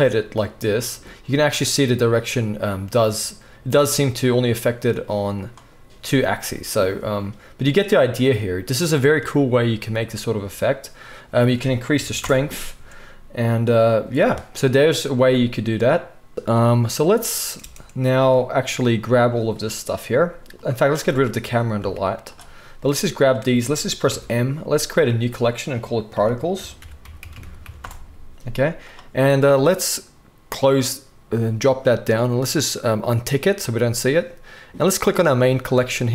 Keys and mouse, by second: 7.8-11.4 middle drag, 11.4-16.3 drag, 16.3-19.2 middle drag, 17.6 space, 19.2-30.7 drag, 21.8 x, 24.1 m, 30.7-33.2 middle drag, 33.2 click, 33.3-35.0 middle drag, 35.0 click, 35.1-36.1 middle drag.